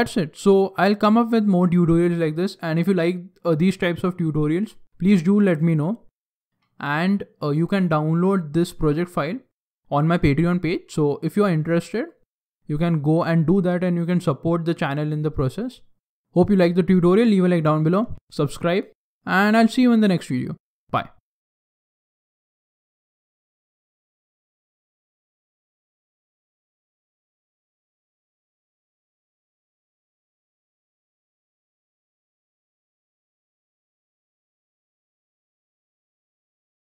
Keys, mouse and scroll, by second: 16.1 ctrl+s, 16.1 middle click, 16.1 scroll down 3.